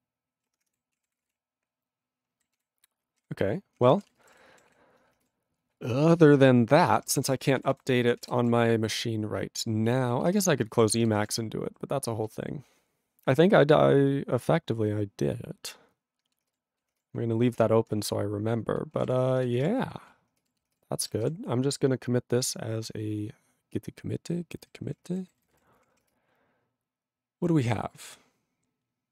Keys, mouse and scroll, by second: 0.5 ctrl+-, 0.9 ctrl+a, 1.0 ctrl+p, 1.2 ctrl+space, 1.3 ctrl+n, 1.8 ctrl+n, 2.6 ctrl+g, 2.9 ctrl+n, 3.2 ctrl+/, 3.8 ctrl+p, 4.1 ctrl+space, 4.1 ctrl+n, 4.2 ctrl+e, 4.3 ctrl+g, 4.7 ctrl+s, 6.6 ctrl+s, 6.8 ctrl+space, 6.9 ctrl+p, 7.6 ctrl+s, 7.7 ctrl+g, 8.2 ctrl+s, 10.5 ctrl+s, 16.6 ctrl+s, 19.8 ctrl+s, 20.9 ctrl+s.